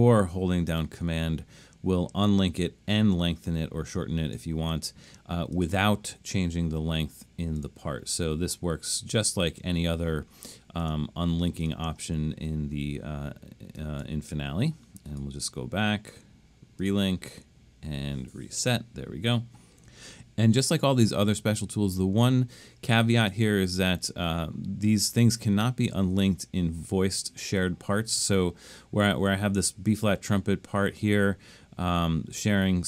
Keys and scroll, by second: 18.7 BackSpace.